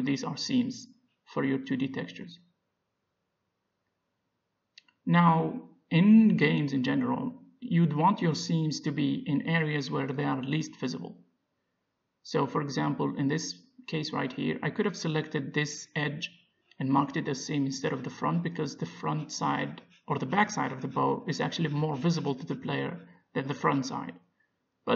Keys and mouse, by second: 10.6-11.6 drag, 11.2-12.4 middle drag, 12.4 ctrl+z, 13.3-14.7 middle drag, 16.2 click, 16.8 middle click, 17.7 click, 17.9 middle click, 20.1-23.2 middle drag, 23.6 a, 23.8 middle click, 24.8-24.9 middle drag.